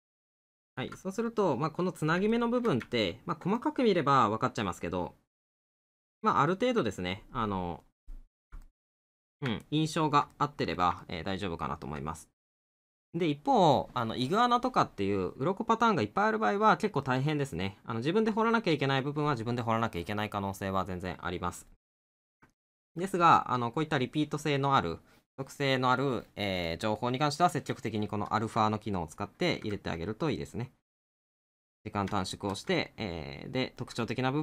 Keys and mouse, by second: 1.1 middle click, 2.4 middle click, 5.4 middle click, 7.0 middle click, 12.2 middle click, 17.1 middle click, 22.6 middle click, 28.7 middle click, 32.2 middle click.